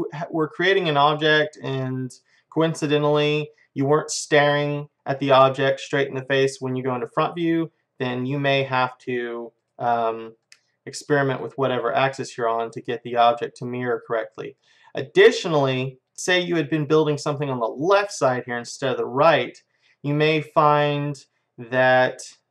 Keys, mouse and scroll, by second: 1.0-3.6 middle drag, 4.5 KP_1, 7.5-9.3 middle drag, 9.6-14.6 drag, 13.2-15.3 middle drag, 20.5-22.5 middle drag.